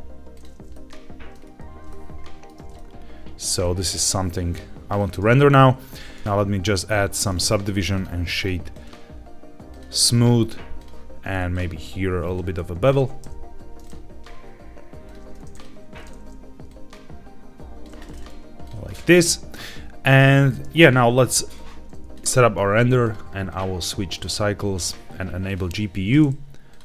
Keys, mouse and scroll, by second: 0.6 middle click, 1.3-1.7 scroll down 2, 1.8-2.5 shift+middle drag, 2.7 ctrl+middle click, 3.6-5.0 shift+middle drag, 5.8 q, 6.2 ctrl+z, 6.7 ctrl+2, 7.1-7.9 right drag, 8.3 click, 8.6-9.7 right drag, 10.7 click, 11.4 click, 12.1-13.8 drag, 15.0 click, 15.4 click, 15.9 click, 16.6-17.8 shift+drag, 17.9 right click, 21.1 ctrl+b, 22.9 click, 23.4-24.2 drag, 24.7 click, 26.6 click.